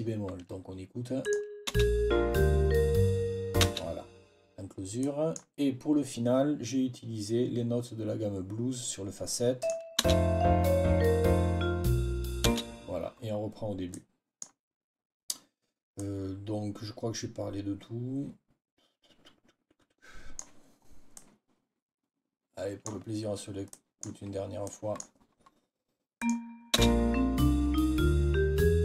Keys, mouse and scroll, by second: 1.1 click, 1.6 space, 3.5 space, 4.9-5.4 scroll up 1, 9.5 click, 10.0 space, 12.4 space, 13.8-14.2 scroll up 3, 16.4-18.1 scroll up 2, 18.1-20.4 scroll up 10, 21.0-21.4 scroll up 1, 21.4 click, 22.2-22.6 scroll up 2, 23.6-24.1 scroll down 2, 24.6-25.0 scroll down 2, 26.6 space.